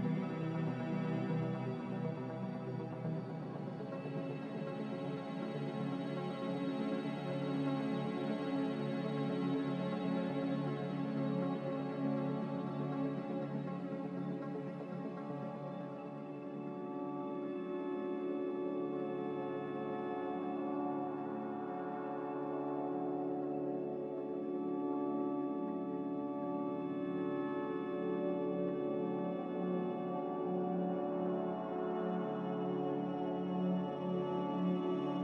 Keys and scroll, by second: 2.2 a, 7.7 1, 11.7 typing, 18.6 typing, 20.5-21.3 typing, 25.4 a.